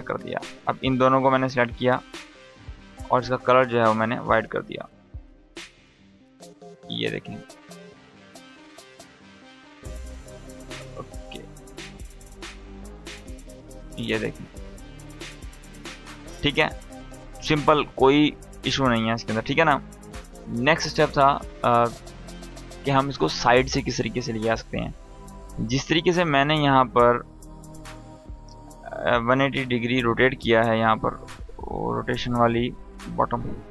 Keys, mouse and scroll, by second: 0.3-5.2 drag, 0.5 ctrl+Num_Lock, 3.6-3.9 click, 5.2 space, 7.1-8.6 drag, 13.9 space, 22.5-22.9 scroll up 1, 24.5 click, 29.1 r, 32.5 click, 33.6 r.